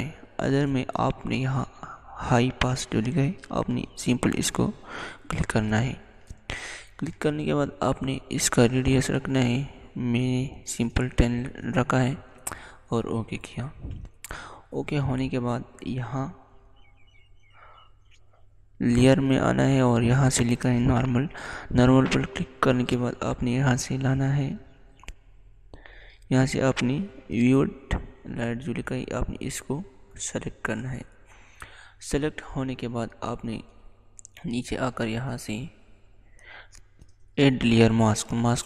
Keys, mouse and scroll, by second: 3.7 click, 12.0 click, 12.1 click, 19.8 click, 28.8 click, 29.0 click, 38.5 click.